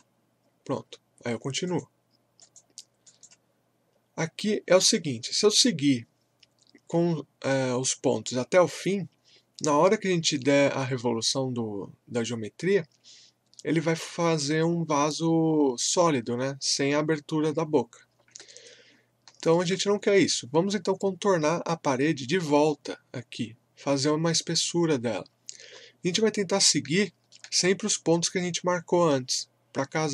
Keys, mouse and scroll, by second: 18.5 alt+Num_Lock, 18.5-22.1 alt+middle drag, 25.7-26.1 scroll up 1, 27.0 alt+middle click.